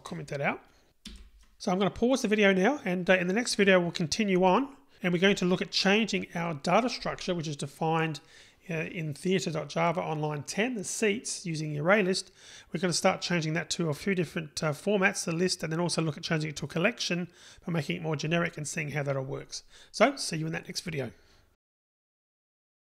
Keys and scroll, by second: 1.2 super+/.